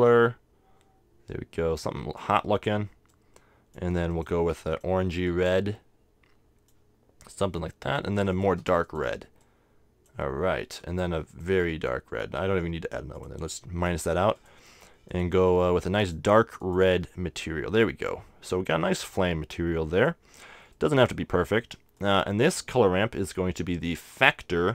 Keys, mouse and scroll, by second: 3.1-6.5 drag, 7.6-10.6 drag, 11.3-12.9 drag, 13.1-16.6 drag, 18.7-21.4 drag, 20.6-22.5 middle drag, 20.8 right click, 22.0-24.7 drag.